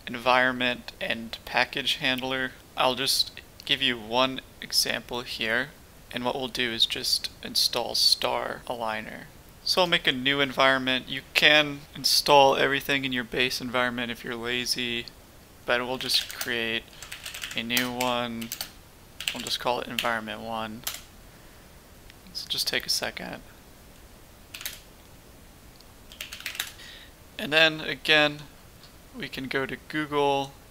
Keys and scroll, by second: 15.6-20.8 typing, 24.5 typing, 24.6 Return, 25.6-27.2 typing.